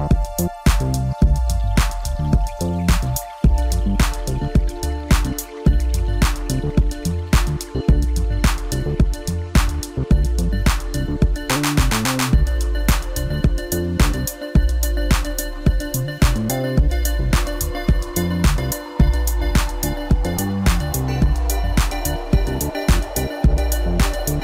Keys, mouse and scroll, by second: 3.3-5.4 drag, 5.4-6.1 scroll up 1, 6.1 KP_1, 7.3 Tab, 7.8-8.9 scroll up 1, 9.0 click, 9.9 shift+click, 10.5 shift+click, 11.2 shift+click, 12.9-14.4 middle drag, 14.4 click, 15.1 click, 15.6 middle click, 16.5 click, 17.4 click, 17.8 middle click, 18.7 scroll down 3, 18.9 middle click, 19.8-20.6 scroll up 1, 20.6 click, 21.3 shift+click, 21.8-23.1 middle drag, 23.1 shift+click, 23.7-24.4 middle drag.